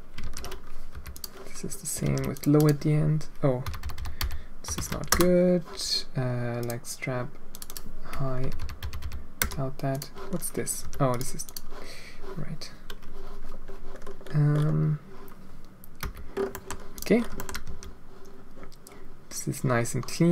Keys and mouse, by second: 0.2 ctrl+c, 0.9 h, 1.1 click, 2.0 ctrl+v, 2.3-5.6 drag, 3.8 BackSpace, 5.0 BackSpace, 6.5 click, 7.5-9.4 drag, 8.5 BackSpace, 8.9 BackSpace, 9.9 click, 10.8 g, 11.4 click, 16.0 h, 16.5 drag, 16.9 click, 17.3 shift+middle click, 17.6 g.